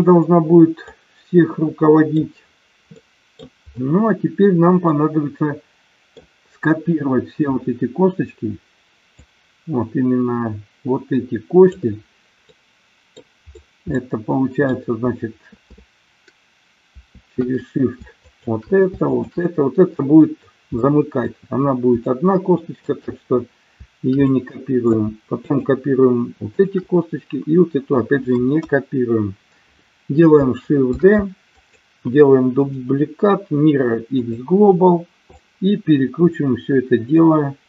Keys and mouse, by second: 0.9-2.1 middle drag, 3.0 middle click, 4.9-6.1 middle drag, 9.1-11.8 drag, 12.5 middle click, 13.9 middle click, 18.3 shift+click, 19.1 shift+click, 20.9 middle click, 22.1 shift+middle click, 24.1 middle click, 25.3 shift+click, 26.6 shift+click, 28.5 KP_1, 30.9 shift+d, 31.5 click, 32.6-34.3 right drag, 35.3-37.6 drag.